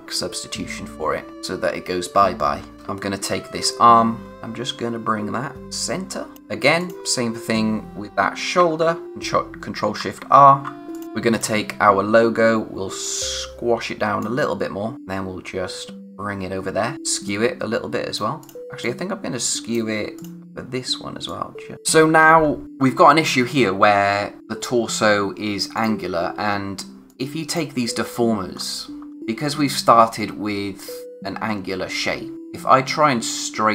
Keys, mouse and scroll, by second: 1.3 click, 2.7-3.4 typing, 3.2 scroll down 1, 4.2 scroll up 1, 4.3 click, 6.3-6.8 scroll up 1, 6.8 click, 9.9 alt+shift+r, 10.9 click, 11.0 scroll up 1, 11.3 click, 17.2 click, 21.7-22.1 scroll down 1, 25.7 click, 28.0 scroll up 1, 32.3 click.